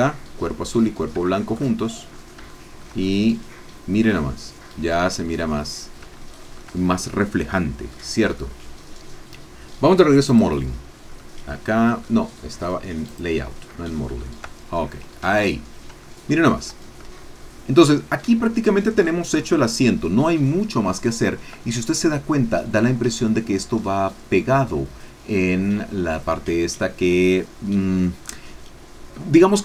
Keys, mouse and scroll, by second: 0.4-0.7 scroll down 2, 1.3 shift+middle click, 1.8-2.4 shift+scroll up 2, 2.5 shift+middle click, 3.0-5.7 shift+middle drag, 6.2 shift+middle click, 6.7-7.7 shift+scroll down 5, 7.9-9.5 drag, 10.3 click, 11.2-12.2 drag, 13.9 shift+click, 14.7-15.8 shift+scroll down 1, 16.2 shift+click, 17.2-18.5 shift+drag, 18.5 shift+middle click, 19.2-21.8 shift+scroll down 1, 21.8-23.1 scroll down 1.